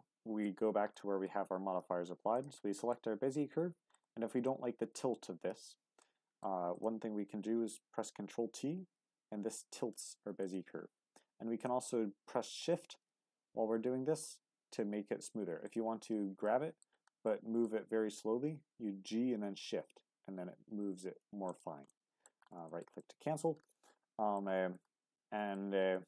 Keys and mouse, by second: 0.9 middle click, 2.3 click, 2.8-3.4 middle drag, 3.9-4.5 middle drag, 4.6 Tab, 6.0 middle click, 6.7 click, 7.9 ctrl+t, 10.4 shift+click, 12.4 ctrl+t, 15.6 shift+click, 16.5 middle click, 17.2 middle click, 18.2 g, 21.5 click, 21.9 middle click, 22.7 shift+middle click, 23.0 middle click, 23.7 middle click, 24.7 middle click, 25.9 middle click.